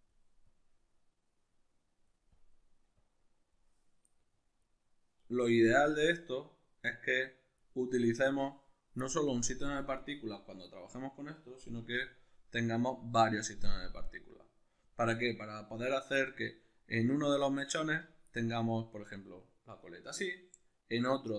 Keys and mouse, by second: 11.7 Tab, 18.2-21.3 shift+middle drag.